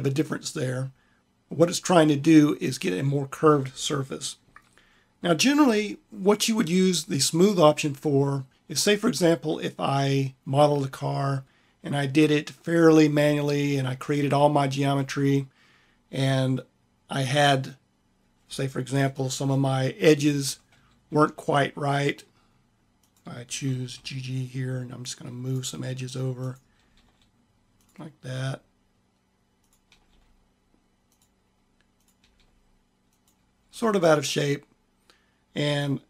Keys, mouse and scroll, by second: 23.5 g, 26.6 g, 26.9 click, 27.9-31.4 drag, 29.8 g, 32.0 g, 33.5 click, 34.8 click.